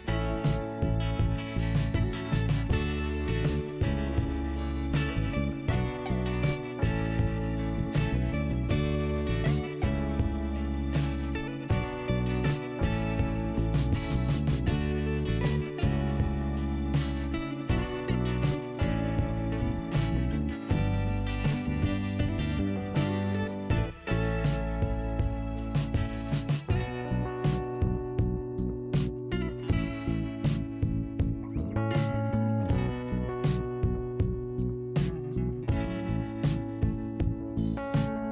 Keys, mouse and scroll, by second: 2.7 scroll down 2, 4.7 click, 5.9 click, 8.9 scroll up 2, 11.0 click, 11.8 click, 11.8-12.2 scroll up 1, 14.1 click, 15.8 click, 17.7 click, 19.9 click, 20.0 click, 20.9 k, 22.3 scroll down 1, 23.5 scroll up 1, 24.8 click, 26.5-27.1 scroll down 1, 27.1 click, 29.2 click, 32.2 click, 35.2 click, 36.6 click, 37.7 click.